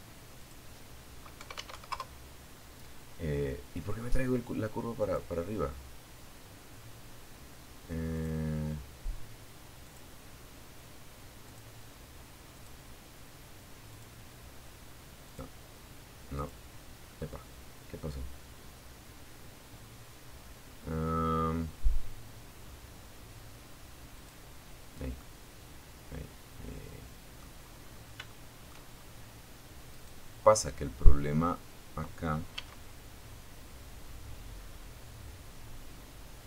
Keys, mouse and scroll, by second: 0.0 KP_1, 0.2 KP_Enter, 3.2 click, 6.3 click, 8.0 click, 9.6 click, 10.8 click, 12.1 click, 13.4 click, 14.6 click, 20.7-21.1 scroll down 2, 22.4 click, 23.4-25.7 middle drag, 26.2 scroll up 1, 26.4 shift+middle click, 28.1 right click, 30.8 s.